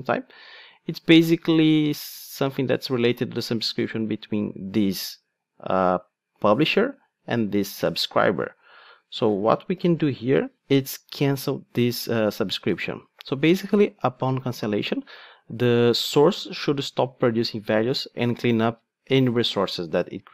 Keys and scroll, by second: 11.1 Return.